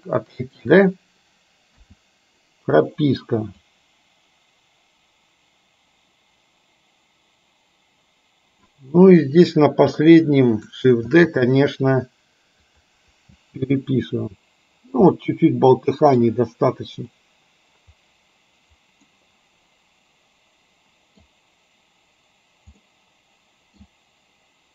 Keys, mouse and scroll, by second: 1.8 i, 3.7-8.7 drag, 9.5 click, 11.2 shift+d, 13.4 space, 15.3-16.2 middle drag, 19.2-21.3 middle drag, 22.9-23.9 middle drag.